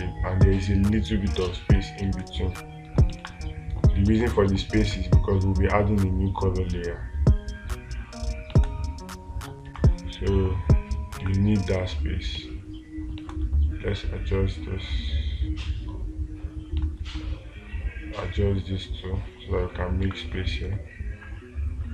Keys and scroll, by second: 2.5 space, 3.7 space, 4.6 space, 9.1 space, 20.5 space.